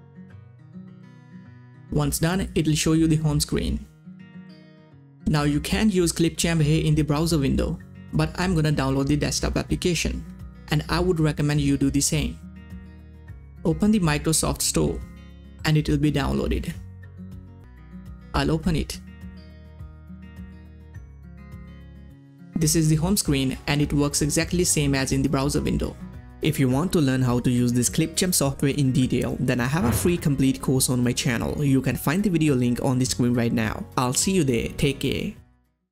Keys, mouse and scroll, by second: 0.9 Return, 0.9 click, 5.8 middle click, 5.8 scroll down 2, 6.3 scroll up 2, 6.9 click, 11.7 click, 19.4 click.